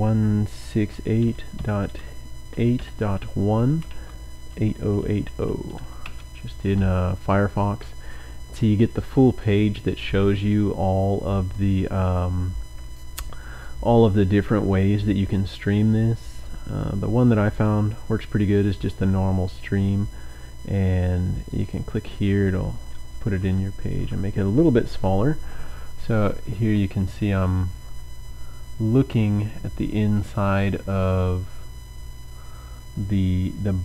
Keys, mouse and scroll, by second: 0.0-5.7 typing, 6.0 Return, 8.9 click, 9.1-9.5 scroll down 2, 9.5-13.8 drag, 17.5 click, 18.8-19.2 scroll down 1, 20.2-20.6 scroll up 1, 21.4 click, 23.6 ctrl+scroll down 2.